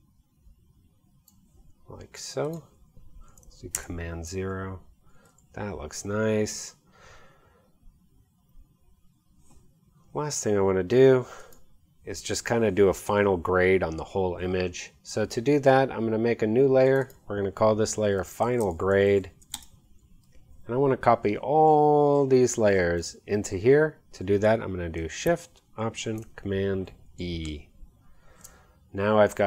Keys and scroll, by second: 3.8 super+0, 18.0-20.0 typing, 27.1 alt+shift+super+e.